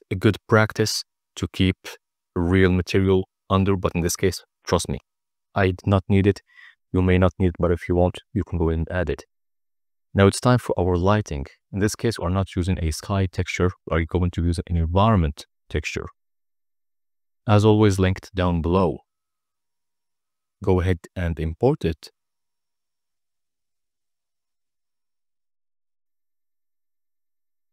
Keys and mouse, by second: 1.8 ctrl+b, 6.0-7.2 drag, 9.0-10.2 drag, 11.0 n, 11.3 n, 11.8 middle click, 12.7 click, 13.1 shift+a, 15.9 click, 17.4-18.3 drag.